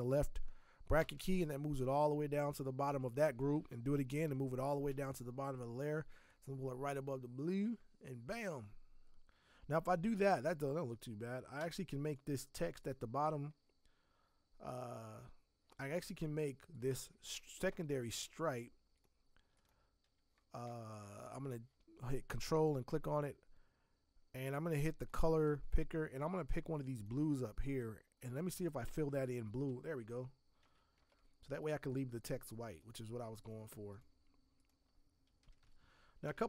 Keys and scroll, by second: 1.0 ctrl+shift+[, 3.9 ctrl+shift+[, 11.6 v, 28.9 alt+BackSpace, 30.6 ctrl+d, 31.0 v, 35.4 Down, 35.6 Down.